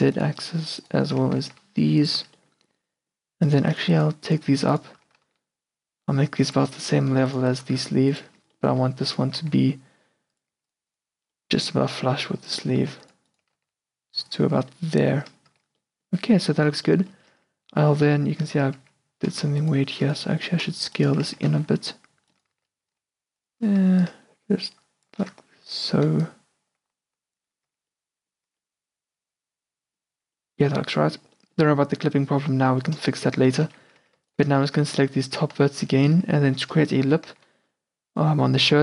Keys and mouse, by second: 1.3 g, 2.3 a, 5.1 g, 6.8 a, 6.9 click, 7.7 g, 8.4 a, 9.3 g, 10.6 a, 11.6 a, 12.8 g, 13.5 g, 14.5 a, 15.6 Tab, 16.8 Tab, 17.4 q, 18.0 q, 18.5 q, 19.0 q, 19.4 middle click, 20.7 s, 21.4 z, 21.6 c, 22.6 z, 23.0 s, 25.4 Tab, 25.7 Tab, 27.8 Tab, 28.3 middle drag, 28.7 Tab, 29.8 middle click, 30.2 Tab, 33.7 Tab, 33.7 q, 34.1 a, 35.1 z, 35.4 click, 35.7 z, 36.3 middle click, 37.1 e.